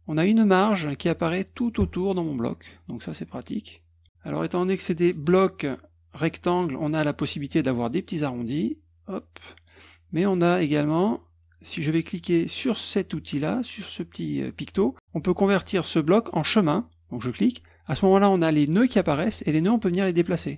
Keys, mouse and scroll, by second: 5.0 click, 7.2 click, 8.3-9.6 drag, 10.3 click, 11.0 click, 17.3 click, 19.2-20.5 drag.